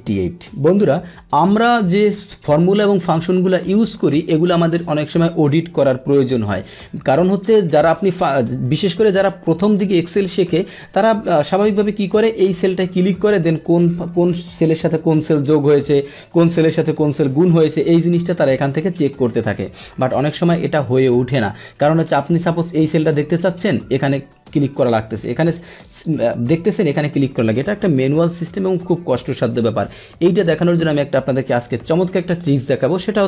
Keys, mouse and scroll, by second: 2.8-4.3 drag, 4.7 click, 12.6 click, 12.8 click, 16.3 Return, 16.8 click, 17.7 F2, 18.4 F2, 18.8 Return, 20.0 click, 23.0 click, 25.7 click, 25.9 click, 27.6 Return.